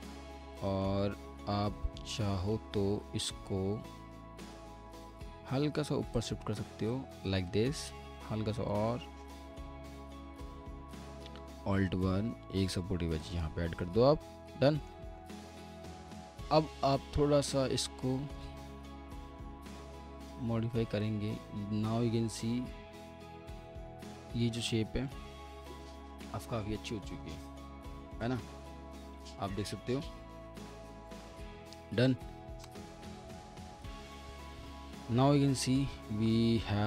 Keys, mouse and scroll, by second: 0.7 alt+middle click, 1.0 alt+w, 2.5 alt+w, 3.0-4.0 scroll up 1, 4.0 1, 9.5 alt+w, 10.0 alt+w, 10.6 alt+middle click, 11.3 alt+1, 13.9 w, 14.6 alt+middle click, 17.5-17.9 scroll down 1, 18.1 alt+middle click, 25.1 alt+middle click, 31.3 middle click, 31.3 scroll down 1, 31.9 alt+middle click, 33.2 F4, 33.9 alt+middle click, 36.6 scroll, 36.7-36.8 scroll up 1.